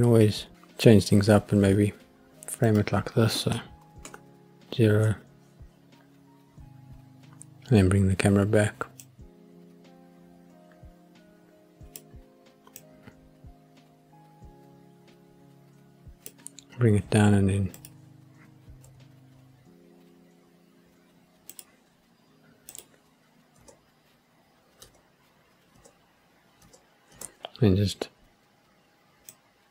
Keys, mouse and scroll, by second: 2.6 click, 4.1 ctrl+alt+KP_0, 9.0-12.0 drag, 12.8-16.4 drag, 17.8 click, 18.9 g, 21.6 click, 22.8 click, 23.6 space, 24.8 space, 26.1 space, 26.6 space, 27.1 space, 29.3 click.